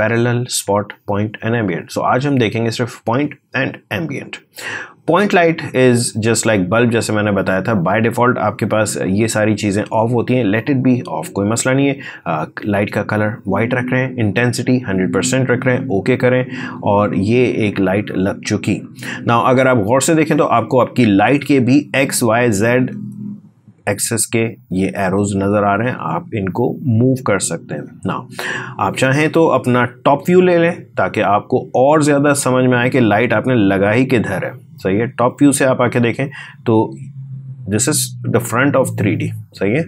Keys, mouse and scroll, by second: 6.8 click, 15.5 click, 18.7-19.5 scroll up 1, 19.5 space, 19.6 click, 20.0 space, 20.5 click, 20.6 space, 22.1-28.9 drag, 29.5-32.1 scroll down 1, 32.8 click, 32.9 click, 35.9-37.7 scroll up 1.